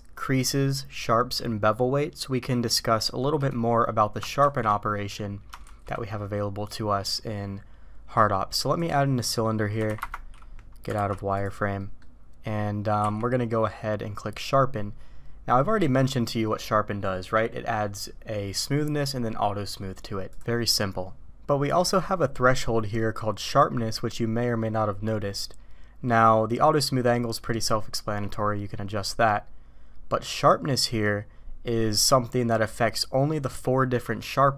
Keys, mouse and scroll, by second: 4.9 middle click, 5.6 shift+a, 8.8-10.5 drag, 10.9 alt+v, 11.8 middle click, 13.0 q.